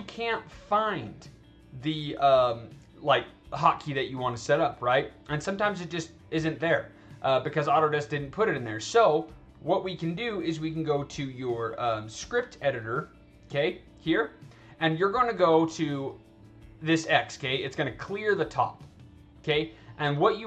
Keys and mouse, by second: 10.7 click, 11.9 click, 12.7 click, 17.2 click.